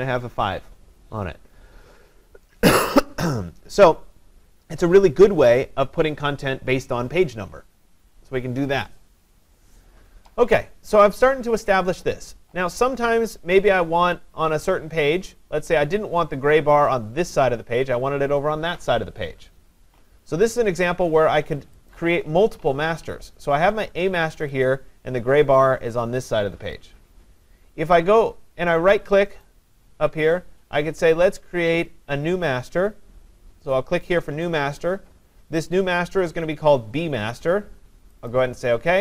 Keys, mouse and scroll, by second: 22.0 click, 24.4 click, 24.7 click, 29.5 right click, 34.5 click, 38.3 click.